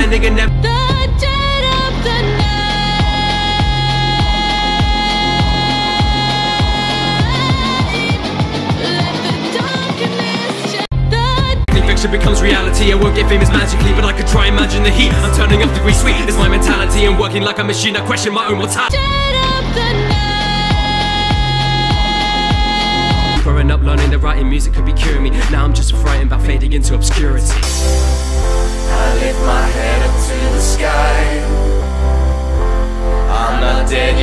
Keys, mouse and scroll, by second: 0.0-0.4 drag, 0.4 space, 11.7 space, 23.3 space, 23.8 scroll down 1, 24.0-25.0 middle drag, 25.0-28.3 scroll up 2, 28.3-29.8 scroll up 1, 29.8 click, 31.4 KP_7.